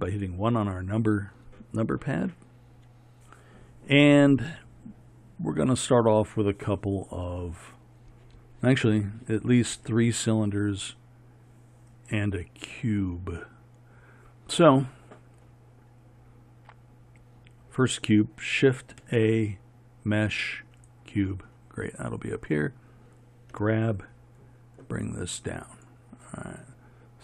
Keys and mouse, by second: 15.6-19.1 middle drag, 19.1 shift+a, 21.3-22.6 middle drag.